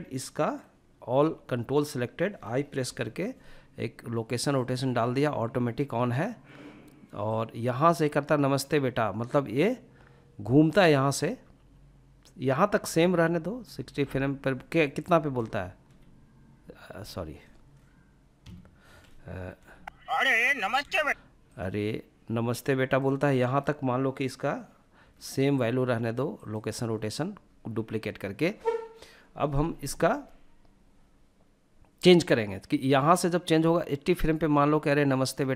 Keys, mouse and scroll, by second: 0.0 a, 1.8 i, 6.3-14.4 drag, 14.8 b, 18.6 space, 19.8 space, 20.4-22.0 drag, 32.2-34.9 drag.